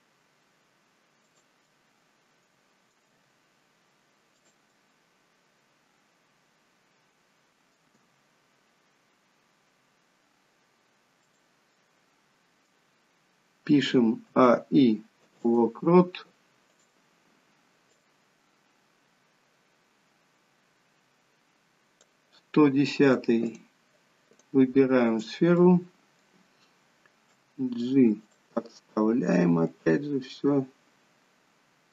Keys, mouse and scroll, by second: 1.6 middle click, 2.9 g, 4.7 middle click, 7.9 g, 11.7 middle click, 14.3 a, 14.5 i, 16.6 click, 17.9 click, 23.6 click, 24.3 click, 25.3 scroll down 2, 25.5 middle click, 27.3 g, 28.5 middle click, 28.5-29.4 scroll up 1, 29.4 g.